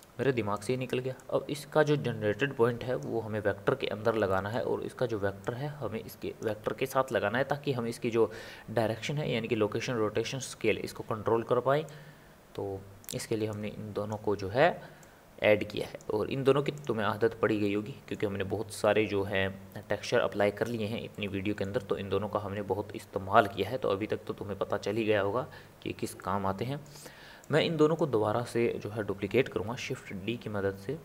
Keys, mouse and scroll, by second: 1.2 click, 4.3-5.6 middle drag, 5.6 click, 12.1 click, 13.7 click, 15.0 click, 16.9 click, 17.6-20.7 middle drag, 21.1-25.1 middle drag, 25.1-26.2 scroll down 3, 26.2-27.6 middle drag, 27.6 click, 29.4 shift+d.